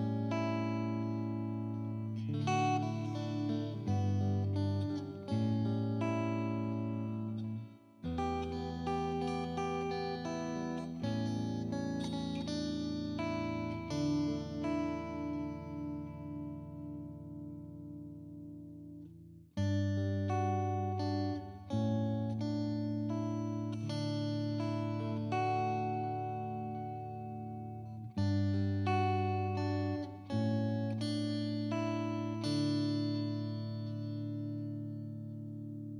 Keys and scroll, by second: 2.1-6.7 typing, 7.0 ctrl+t, 7.8 Return, 8.5 Delete, 9.3-16.9 typing, 11.6 Return, 12.1 Return, 17.5 ctrl+t, 19.5 Return, 20.4-24.3 typing, 25.4 Return, 28.0 space, 32.0 ctrl+t, 32.3 Return, 35.7-35.9 typing.